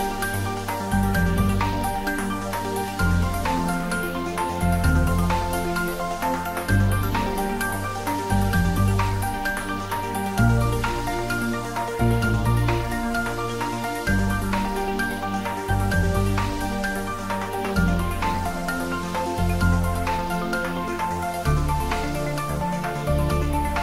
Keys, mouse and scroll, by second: 0.9 Tab, 1.3 click, 2.3-3.2 middle drag, 4.2 shift+click, 6.5 i, 9.5 s, 9.9 x, 11.1 y, 14.1 click, 14.5-14.9 scroll down 1, 14.9-15.5 middle click, 15.9 Tab, 16.3-17.1 middle click, 16.9 click, 17.2-17.7 scroll up 1, 17.7-19.9 middle drag, 20.6-22.7 scroll up 1, 22.7-23.8 middle drag.